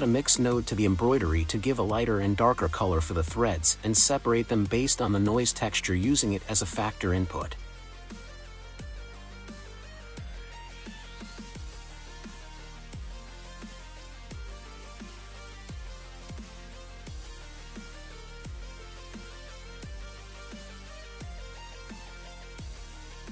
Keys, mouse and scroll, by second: 2.0-3.2 scroll up 2, 3.2 drag, 5.1 click, 6.2 click, 6.5 middle click, 7.0-7.6 scroll up 1, 7.6-9.0 middle drag, 9.0 click, 13.5-14.4 scroll up 6, 14.4-15.1 scroll up 1, 15.1-15.7 scroll down 3, 16.0 click, 19.9-20.7 scroll down 2, 20.7 click.